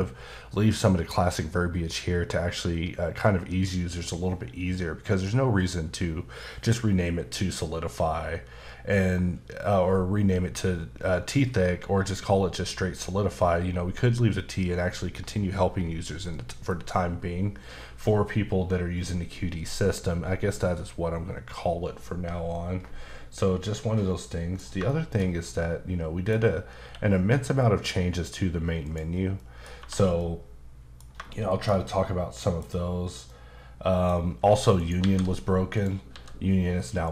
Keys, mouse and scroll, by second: 23.7 middle click, 24.9 shift+middle click, 26.8 q, 28.8 click, 29.4 middle click, 29.8 1, 30.2 middle click, 31.3 shift+middle click, 33.3 middle click, 34.8 shift+right click, 35.0 shift+a, 35.7 click, 36.1 s, 37.0 click.